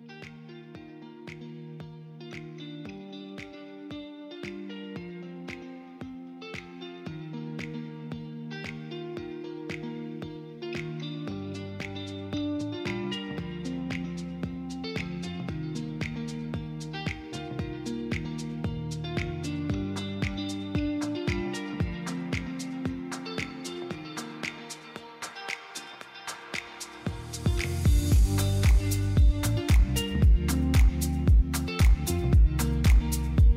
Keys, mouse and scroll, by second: 0.0 shift+middle click, 0.9 middle click, 1.9-4.7 shift+middle drag, 7.7 click, 9.4-10.7 drag, 14.5 KP_0, 16.1-17.4 drag, 23.6 click, 25.2 click, 26.5 click, 27.0 KP_0, 28.9 middle click.